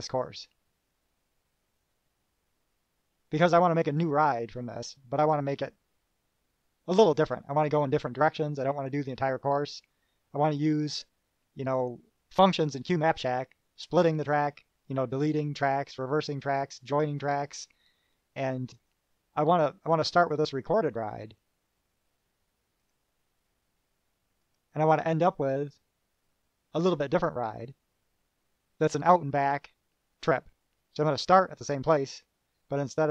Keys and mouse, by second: 12.0 click, 19.0 click, 23.1 click, 24.7 click, 25.4 click, 27.4 click.